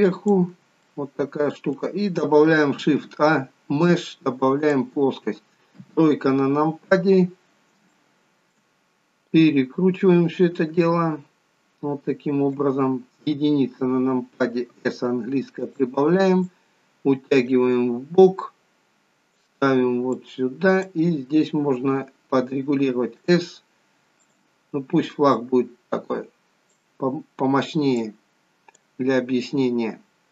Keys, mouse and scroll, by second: 0.7 shift+middle click, 2.6 shift+a, 5.7 KP_3, 7.8 shift+middle click, 9.2 click, 13.1 KP_1, 14.7 s, 16.5 click, 20.1 click, 21.7 s, 24.1 click, 25.3 click, 27.9 click.